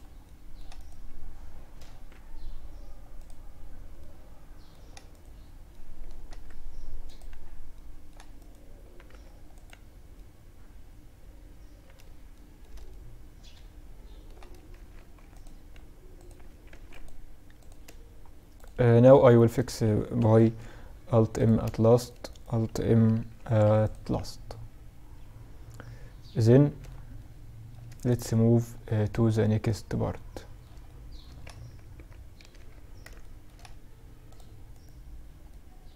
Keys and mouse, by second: 0.7 middle click, 1.2 x, 3.1-6.2 middle drag, 4.2 right click, 5.4 x, 7.5 right click, 8.2 x, 10.8 middle click, 11.4-14.1 middle drag, 14.1 ctrl+r, 15.8 ctrl+r, 17.7 click, 18.2-19.6 middle drag, 19.6 alt+m, 19.6 click, 21.1-25.6 drag, 22.5 alt+m, 26.3-28.6 middle drag, 28.6-30.8 middle drag, 30.8 ctrl+r, 33.5-34.8 drag, 33.9 right click, 34.8-35.9 middle drag.